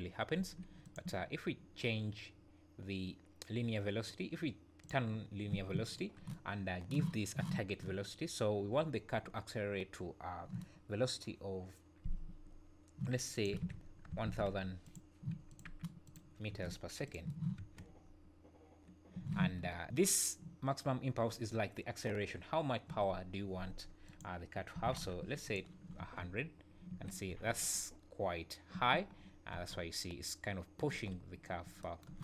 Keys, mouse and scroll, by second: 0.4 Escape, 0.8 click, 4.8 click, 13.4 click, 14.2 KP_0, 14.4 KP_0, 15.5 click, 17.6 space, 19.2 Escape, 24.0 click, 25.0 KP_0, 26.0 space, 26.9 Escape, 27.3 space, 28.7 Escape, 29.2-29.7 scroll down 3, 29.5 space, 30.9 Escape.